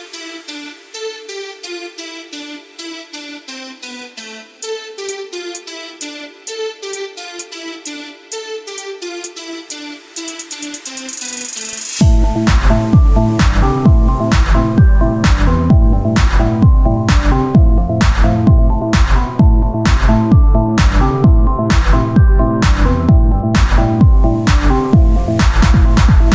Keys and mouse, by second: 0.8 r, 3.0-6.8 drag, 6.8 r, 8.8-10.0 drag, 11.5 KP_1, 11.9 z, 13.8 Tab, 14.3 right click, 14.9 c, 16.1 z, 16.8-18.2 drag, 18.2 Tab, 21.0 Tab.